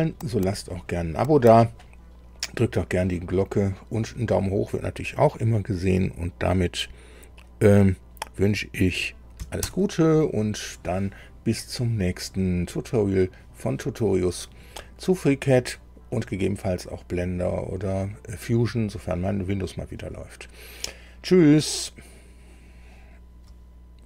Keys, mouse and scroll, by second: 9.6 super+i.